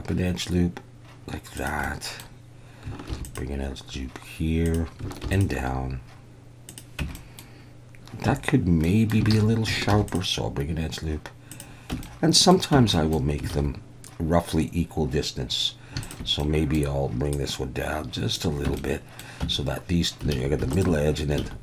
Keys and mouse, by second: 1.6 click, 2.0 middle click, 3.1 ctrl+r, 4.6 click, 5.2 ctrl+r, 6.6 click, 7.0 Tab, 7.1 click, 8.4 Tab, 8.8 middle click, 9.3 alt+a, 9.9 ctrl+r, 11.5 click, 11.9 Tab, 12.0-12.5 middle drag, 12.7 Tab, 12.9 middle click, 13.5 alt+a, 16.4 middle click, 17.3-18.3 drag, 18.7 Tab, 18.8 middle click, 19.4 Tab, 20.3 alt+a, 20.7 alt+shift+click, 21.4 alt+a.